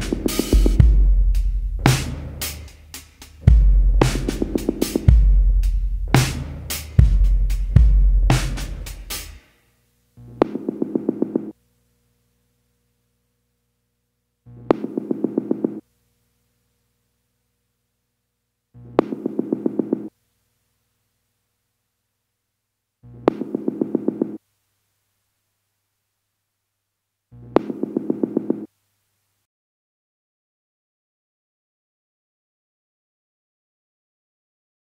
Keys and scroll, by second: 3.0 scroll, 7.2 ctrl+z, 7.5 ctrl+z, 9.0 ctrl+z, 10.1 ctrl+z, 30.7 ctrl+z, 31.9 ctrl+z, 32.4 ctrl+z.